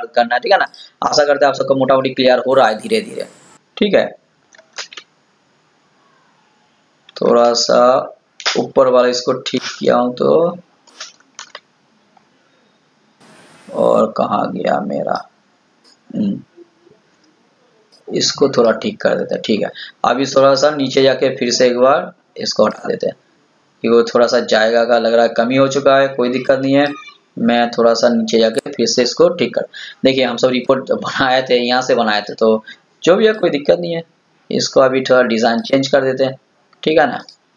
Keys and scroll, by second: 4.6 ctrl+z.